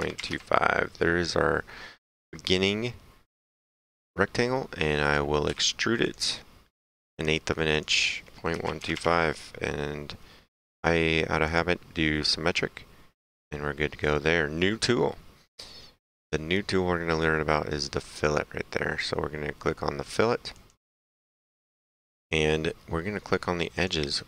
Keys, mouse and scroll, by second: 0.0-0.2 typing, 0.3 KP_Enter, 5.1 click, 5.5 s, 6.1 click, 8.6 KP_Decimal, 8.7 KP_1, 8.9 KP_2, 9.0 KP_5, 11.5 click, 13.4 click, 14.0 middle click, 20.6 click, 23.8 click.